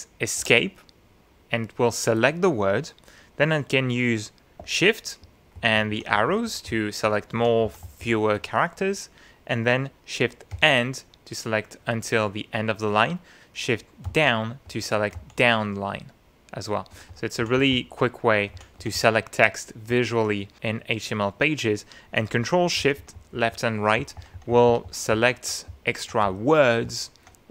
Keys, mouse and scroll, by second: 0.4 Escape, 5.5 shift+Right, 6.1 shift+Left, 6.7 shift+Right, 7.4 shift+Left, 7.6 shift+Right, 8.4 shift+Left, 10.5 shift+End, 14.0 shift+Down, 14.7 shift+Up, 15.1 shift+Down, 16.9 shift+Up, 17.4 shift+Down, 18.5 shift+Down, 18.8 shift+Up, 19.9 shift+Left, 22.8 ctrl+shift+Left, 24.0 ctrl+shift+Right, 25.1 ctrl+shift+Left, 25.7 ctrl+shift+Right, 26.3 Left, 26.8 Right.